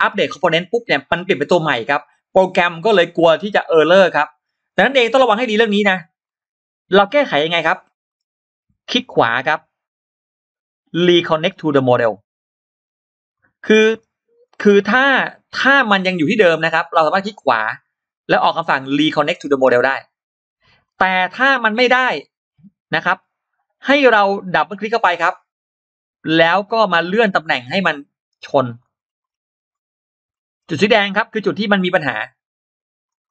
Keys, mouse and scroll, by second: 6.1 scroll down 2, 6.6-6.9 scroll up 2, 7.5 click, 7.9 scroll up 2, 8.7 right click, 12.1 click, 13.5 middle click, 14.2 click, 14.5 middle click, 14.9 click, 15.3 click, 15.6 click, 17.6 right click, 19.5 click, 20.7 click, 21.6-21.9 scroll up 2, 23.0 scroll down 2, 23.4-24.0 scroll up 2, 25.0 click, 26.1 scroll up 1, 27.2-28.6 drag, 28.8 scroll down 2, 29.5-30.4 scroll up 4, 33.1 click.